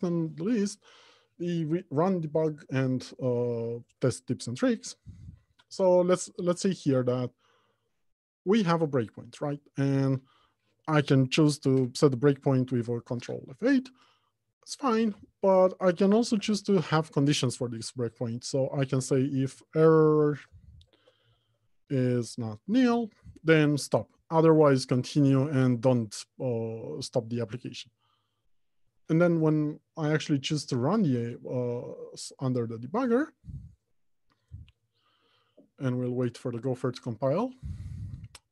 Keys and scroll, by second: 12.5 ctrl+F8, 16.8 ctrl+shift+F8, 23.0 Return.